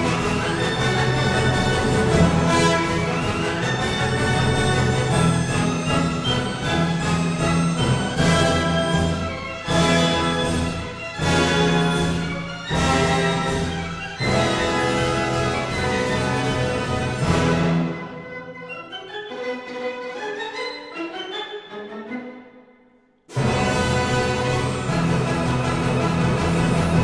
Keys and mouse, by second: 0.5 click, 1.6 Tab, 1.9 alt+z, 3.6 click, 8.0 click, 9.7-10.9 drag, 12.5 click, 14.0 click, 14.9 click, 16.7 KP_3, 17.7 KP_1, 20.2 click, 21.2 g, 21.3 z, 22.0 shift+click, 23.8 g, 23.9 z, 25.0 shift+click.